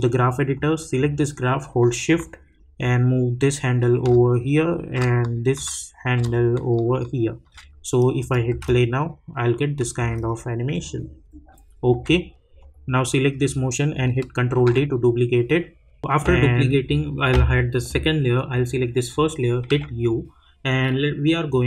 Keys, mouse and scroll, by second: 2.8-6.1 shift+drag, 6.1-8.2 drag, 8.5 space, 10.7 click, 11.9 k, 12.6 click, 14.5 ctrl+d, 17.3 click, 19.7 u, 21.2 click.